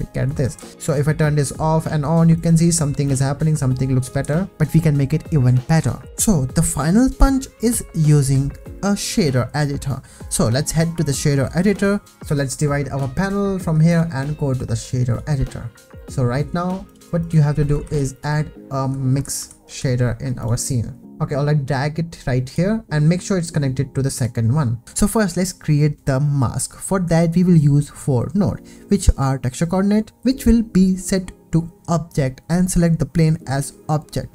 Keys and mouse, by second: 0.6 ctrl+s, 2.4 click, 4.2 ctrl+s, 11.1 click, 13.9-15.2 drag, 16.8 click, 17.2 click, 17.8 shift+a, 21.0 shift+a, 23.4 click, 24.8 x, 24.8 shift+a, 32.2 click, 33.3 click, 33.5 shift+a.